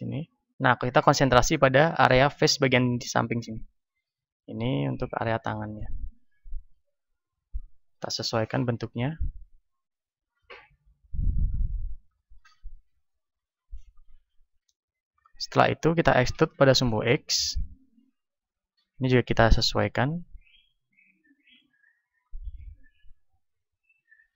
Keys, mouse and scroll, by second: 0.2 ctrl+Tab, 1.5-3.4 right drag, 1.9-3.4 drag, 3.4 middle click, 3.7 z, 4.3 middle click, 5.1-7.6 drag, 6.7 ctrl+Tab, 8.1 right click, 8.7-11.9 drag, 11.9-13.5 middle drag, 12.5 ctrl+Tab, 13.7-15.3 right drag, 14.6 KP_1, 15.3-17.5 middle drag, 16.5 e, 18.3-20.3 drag, 19.0 r, 21.0-24.3 drag, 21.7 z, 22.3-24.0 middle drag.